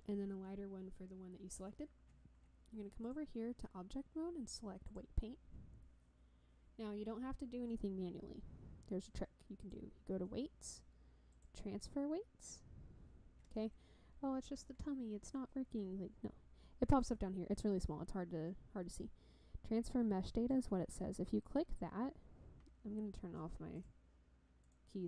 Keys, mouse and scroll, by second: 3.0-5.1 drag, 9.6-11.5 drag, 20.6 click, 23.7 click, 24.6 click.